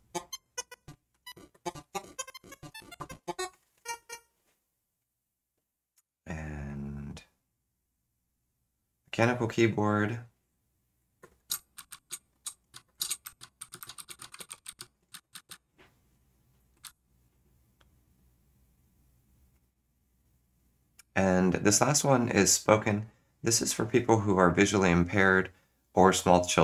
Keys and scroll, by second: 0.0-4.0 typing, 4.1 Return, 11.2-15.3 typing, 16.8 BackSpace.